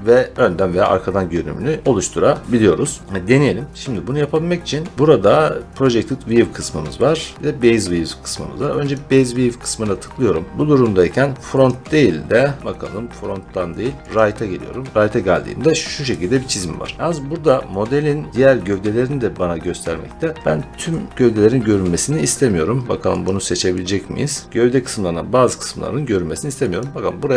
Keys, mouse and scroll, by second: 1.9-4.9 middle drag, 8.8-16.1 drag, 19.8-21.1 scroll, 23.1 click, 23.7 click, 24.4 click, 26.7 click.